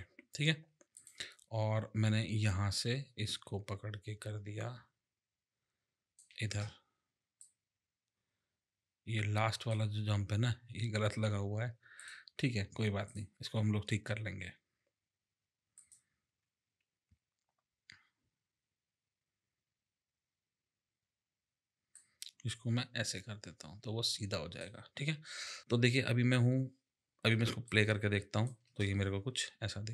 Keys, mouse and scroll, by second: 1.0 click, 2.7 click, 7.4 click, 12.0 click, 13.1 click, 15.8 click, 21.9 click, 25.6 click, 27.6 click, 28.6 click, 29.5 space.